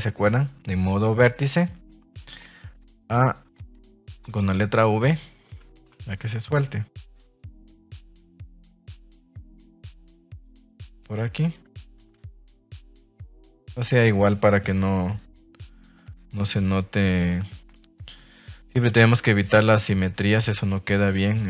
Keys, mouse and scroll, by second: 2.3 shift+middle drag, 3.5 right click, 4.2 g, 5.4 Escape, 5.8 v, 9.7 middle click, 10.3 shift+scroll up 1, 10.5 shift+scroll down 1, 10.7 scroll up 1, 11.4 right click, 11.9 g, 12.8 Escape, 13.5 right click, 14.7 v, 15.9 click, 16.2 right click, 17.1 click, 17.4-17.9 middle drag, 18.7 KP_3, 19.7 shift+middle click.